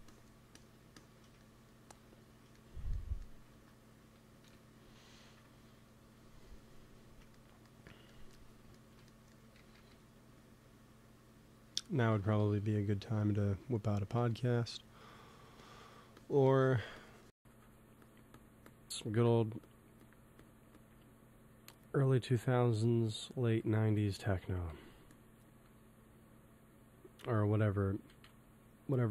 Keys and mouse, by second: 3.4 ctrl+s, 4.7 KP_1, 8.2-9.5 middle drag, 9.5 g, 9.6 f, 10.2 f, 10.4-12.0 drag, 12.0 shift+c, 12.3 f, 13.2 f, 14.1 f, 15.0-22.9 drag, 18.9 middle click, 18.9 right click, 23.5-25.5 drag, 24.6 g, 24.8 f, 25.4 f, 25.9-27.4 drag, 28.1 ctrl+z, 29.0 p.